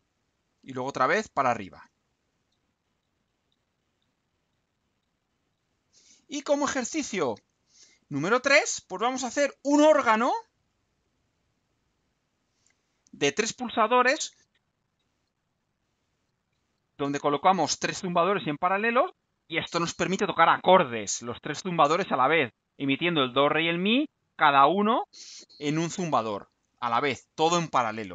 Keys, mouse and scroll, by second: 5.4 click, 6.6 click, 7.2-7.8 scroll down 2, 8.9 right click, 10.6 click, 12.0 click.